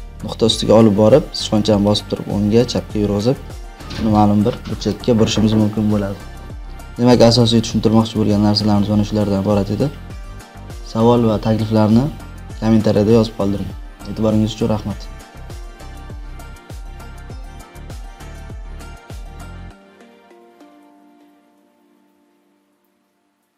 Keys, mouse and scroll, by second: 1.8-2.8 drag, 5.9 click.